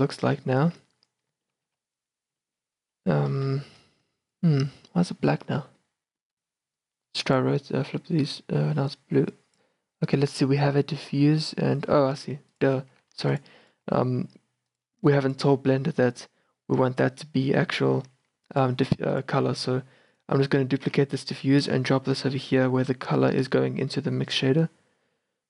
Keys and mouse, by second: 0.8 shift+b, 1.8 shift+b, 3.8 shift+b, 6.9-11.0 drag, 11.9-12.7 middle drag, 12.7-14.0 right drag, 13.1 g, 14.0 g, 15.1 a, 15.2 a, 18.7-20.2 drag, 21.0 shift+d, 21.2-22.0 drag.